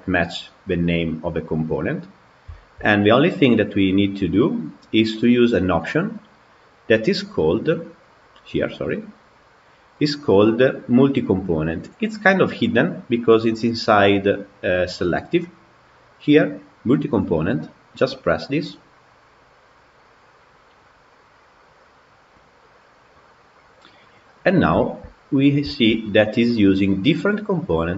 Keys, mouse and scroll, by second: 0.5 click, 2.1 scroll down 3, 2.4-3.1 shift+middle drag, 3.1 click, 5.4 click, 8.0 click, 8.4-9.6 scroll down 14, 12.6-13.1 scroll down 3, 24.1 click, 24.6-25.1 shift+middle drag, 25.1-25.5 scroll up 4, 25.5-26.3 shift+middle drag, 26.3-27.9 scroll down 2.